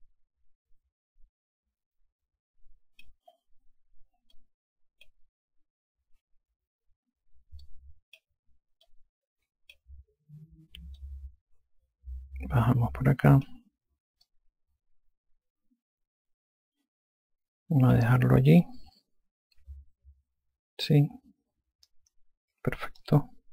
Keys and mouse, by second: 5.2 alt+click, 8.5 alt+click, 9.7 click, 11.8 click, 15.1 click, 19.5 alt+click.